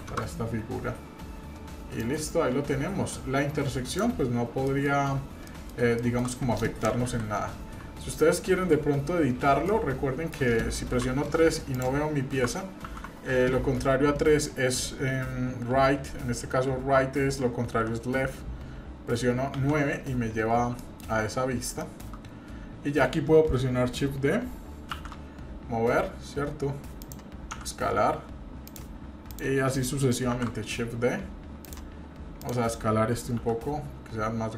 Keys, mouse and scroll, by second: 2.0-4.0 drag, 4.2-4.5 scroll down 3, 4.7 middle click, 4.9 scroll up 3, 5.4 shift+middle click, 6.0 middle click, 7.0 KP_3, 7.6 KP_1, 8.5 KP_3, 9.7-10.3 middle drag, 10.9 KP_3, 11.7 drag, 13.0 ctrl+z, 19.5 KP_9, 20.8-21.1 shift+middle drag, 21.1-21.8 scroll up 3, 21.8-22.1 shift+middle drag, 22.1-22.6 scroll up 2, 24.9 shift+d, 27.5 s, 29.3 click, 30.3 shift+d, 32.4 click, 33.4 s.